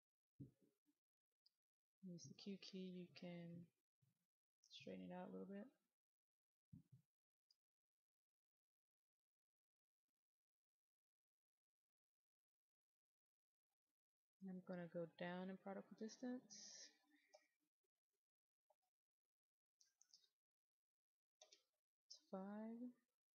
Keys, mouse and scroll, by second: 0.8-1.4 q, 1.6 click, 1.6 q, 3.4 click, 5.6 click, 5.9 click, 8.0 click, 9.0-10.1 scroll up 1, 10.1 click, 13.5 middle click, 16.4 click, 18.6 KP_5, 21.3 Return, 22.8-23.3 drag.